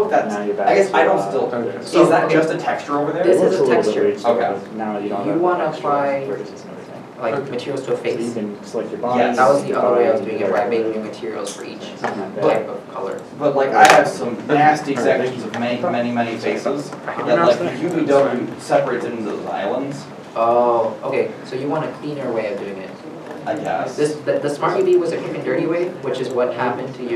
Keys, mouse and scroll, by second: 23.0 scroll down 1, 23.2 shift+middle click, 23.6 shift+Caps_Lock.